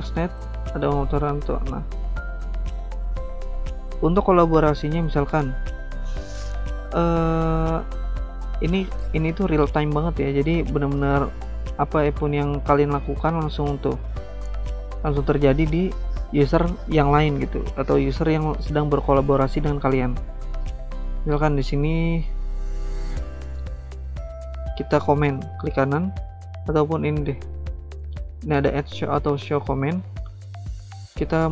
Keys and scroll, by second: 0.1 alt+Tab, 12.1 alt+Tab, 12.7 alt+Tab, 13.2 alt+Tab, 14.9 alt+Tab.